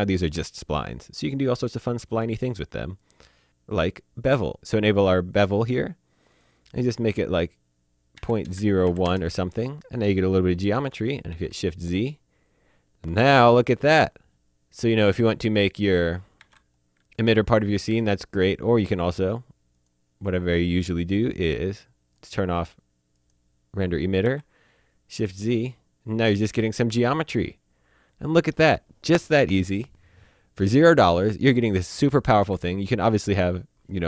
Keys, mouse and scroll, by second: 1.3 click, 5.2 click, 8.1 KP_Decimal, 8.4 KP_0, 8.8 KP_1, 9.0 KP_Enter, 11.2 shift+Num_Lock, 11.3 shift+z, 15.8 click, 16.4 z, 17.6 click, 19.7 click, 22.2 click, 24.2 z, 32.4 shift+Num_Lock, 32.5 z.